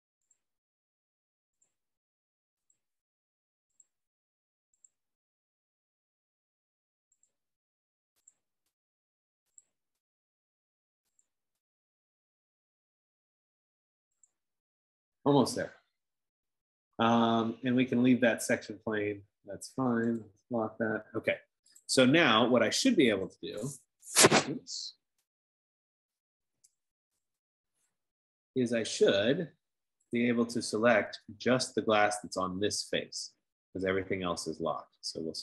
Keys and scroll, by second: 13.3 F15, 26.5-27.5 typing.